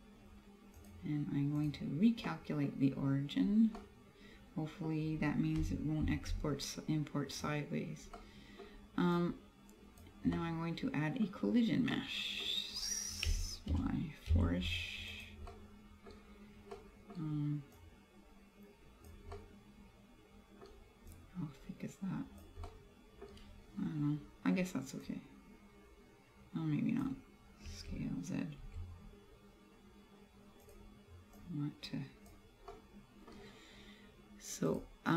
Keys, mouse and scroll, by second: 0.8 click, 2.3 middle click, 3.0 scroll up 2, 3.5-3.8 scroll down 2, 3.8 middle click, 6.1 shift+a, 8.2 middle click, 9.2 click, 10.4 middle click, 11.4 scroll up 2, 12.0 middle click, 13.4 s, 15.3 click, 15.5 middle click, 16.2-16.6 scroll down 1, 17.8 click, 19.4 middle click, 21.2 click, 22.7 middle click, 25.1 click, 27.8 s, 30.8 click, 31.4 click, 32.8 middle click, 34.7 click.